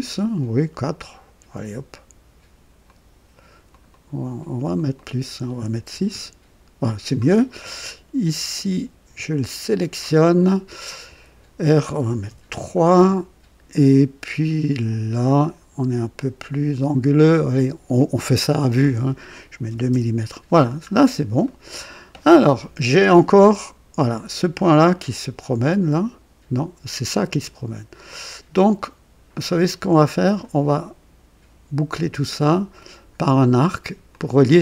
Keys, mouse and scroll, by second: 2.8 click, 3.7 click, 4.7 click, 5.9 KP_6, 6.1 Return, 9.4 click, 11.0 r, 12.2 KP_3, 12.4 Return, 16.1 click, 18.7 r, 19.6 KP_2, 19.9 KP_Enter, 20.8-21.1 scroll down 2, 21.4 right click, 25.3-30.5 drag, 32.0 click, 34.1 click.